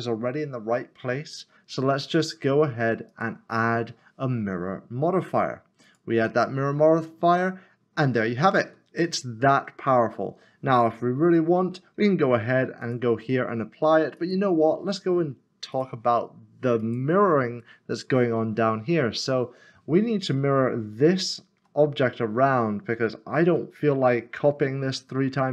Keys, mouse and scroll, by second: 2.0 click, 5.8 click, 7.5 click, 7.6 middle click, 12.8 middle click, 17.2 click, 21.3 shift+middle click, 21.9 scroll up 1, 23.0 shift+middle click.